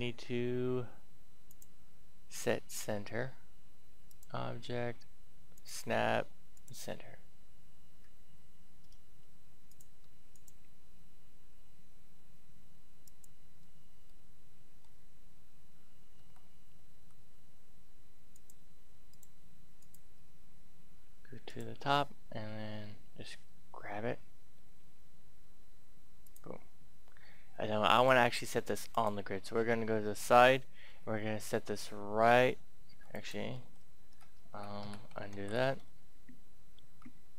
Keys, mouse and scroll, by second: 4.4 click, 8.0-9.7 scroll up 1, 9.7 click, 14.1 middle click, 16.1 Tab, 16.9 a, 18.3 click, 23.5 g, 26.2 click, 28.8-30.0 drag, 30.8 g, 33.0 click, 33.4 ctrl+shift+z, 34.8 ctrl+Tab, 35.3 ctrl+z, 36.8 Tab.